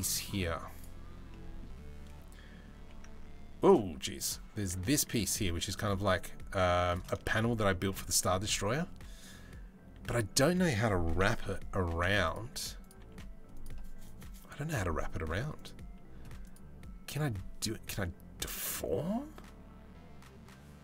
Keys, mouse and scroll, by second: 0.3 click, 2.4 g, 5.0 s, 6.8 middle click, 7.9 middle click, 10.8 KP_7, 11.5 g, 12.0 r, 12.6 g, 15.1 click, 16.1-20.8 drag.